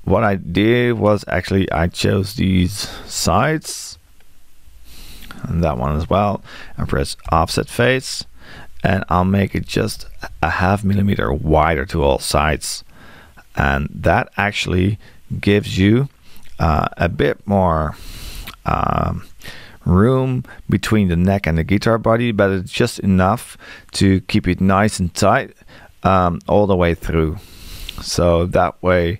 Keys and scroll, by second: 9.5 space.